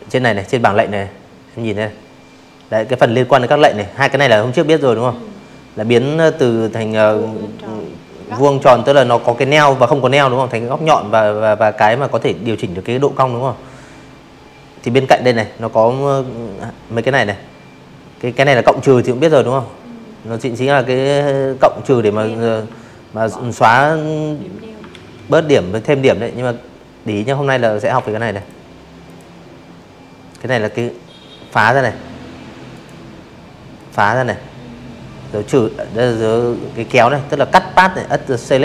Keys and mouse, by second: 16.5-17.6 drag, 20.6 click, 21.9 ctrl+z, 24.9 a, 25.4 click, 26.0 click, 27.6 click, 29.7 click, 30.7 click.